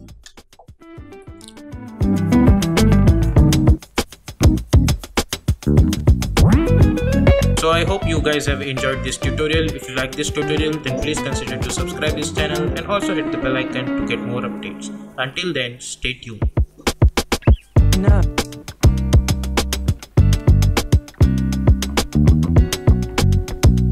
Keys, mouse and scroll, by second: 0.1 space.